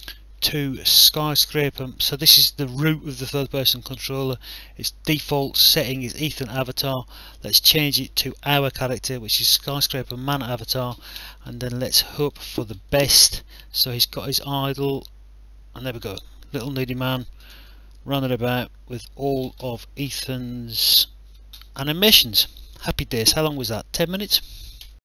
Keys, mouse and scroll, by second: 9.9 click, 12.2 click, 14.9 w, 17.5 w, 22.1 w, 24.8 alt+F9.